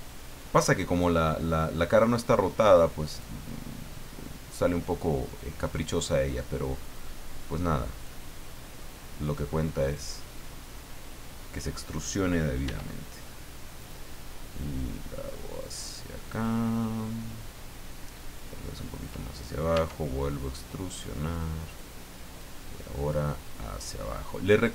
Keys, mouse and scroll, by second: 0.4 click, 1.9-6.2 drag, 3.3 middle click, 4.2-6.2 right drag, 6.9-8.2 drag, 8.3 middle click, 9.0-9.6 scroll up 1, 9.8 right click, 10.2-11.4 middle drag, 12.6 e, 13.8 click, 14.8-16.6 drag, 18.4 click, 19.7 e, 21.7 click, 22.4 click, 24.2-24.7 drag.